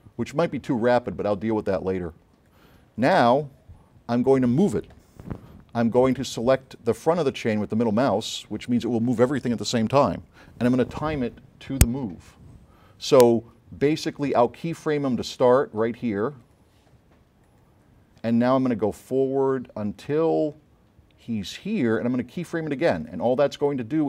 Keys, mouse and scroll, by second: 2.5 click, 6.2 space, 7.3-8.1 middle drag, 16.5 click, 17.5 click, 19.3-21.4 drag.